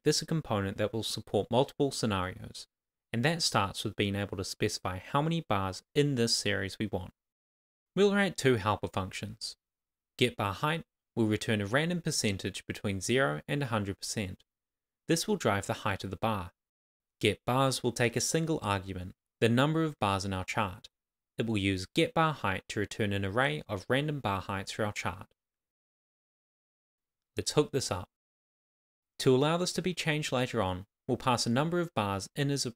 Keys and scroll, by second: 32.4 shift+[, 32.4 shift+], 32.5 Left.